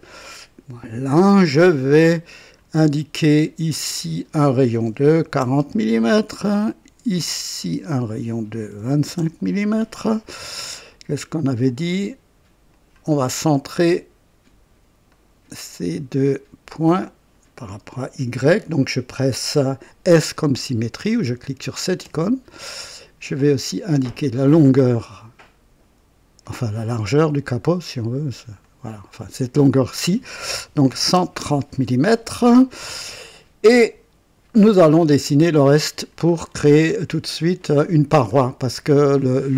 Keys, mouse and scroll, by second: 2.2 click, 3.9 click, 5.2-7.4 typing, 5.9 Return, 7.1 click, 8.0 click, 8.8-9.1 typing, 9.1 KP_Enter, 10.6-11.3 typing, 10.9 right click, 11.6 click, 12.7 click, 15.0 click, 15.3-16.1 typing, 16.6 click, 22.0 s, 23.9 click, 26.4 click, 28.6 click, 30.6 KP_1, 31.1 KP_3, 31.1 KP_0, 31.3 Return, 36.5 scroll up 1, 37.0 right click, 38.4-38.8 scroll down 1.